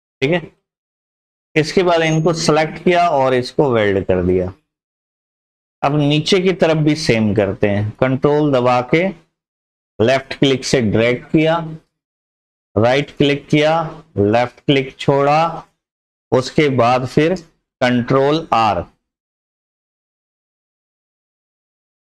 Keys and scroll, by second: 18.6 ctrl+r, 19.0 ctrl+r, 19.4 ctrl+r, 19.7 ctrl+r, 20.1 ctrl+r, 20.4 ctrl+r.